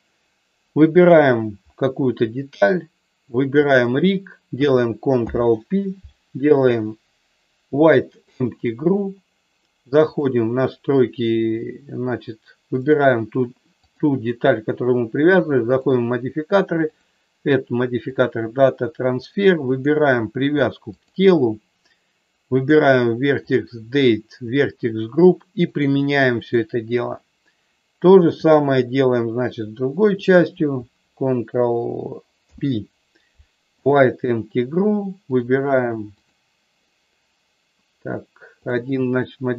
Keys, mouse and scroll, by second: 3.6 shift+click, 5.3 ctrl+p, 12.7 click, 13.7 click, 15.6 click, 16.7-18.2 drag, 22.5 click, 23.4 click, 24.5 click, 25.8 click, 28.4 click, 30.2 shift+click, 32.4 ctrl+p, 35.2 click, 36.2 click, 38.7 click.